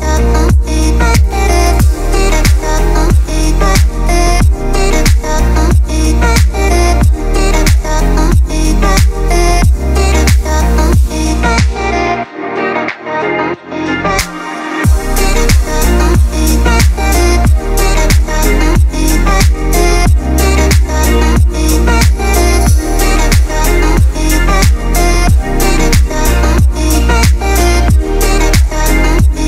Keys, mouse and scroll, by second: 0.0 space, 0.7-3.9 drag, 3.9-24.3 drag, 24.3 space, 24.4 click, 24.5 space, 25.3-29.1 drag, 29.1 space, 29.1 click, 29.4 space.